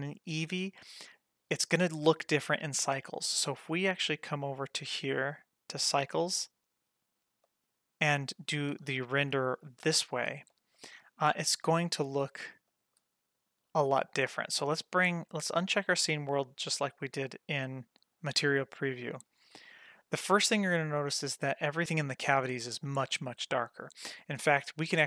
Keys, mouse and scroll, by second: 5.2 click, 6.8-7.5 scroll down 1, 7.5-8.3 middle drag, 8.4-8.8 scroll up 2, 8.8-9.2 shift+middle drag, 9.4-9.9 middle drag, 10.0-10.3 scroll down 2, 10.5 shift+middle click, 11.5 g, 14.5-16.1 drag, 18.6-19.0 scroll up 2, 19.2-19.5 scroll down 1.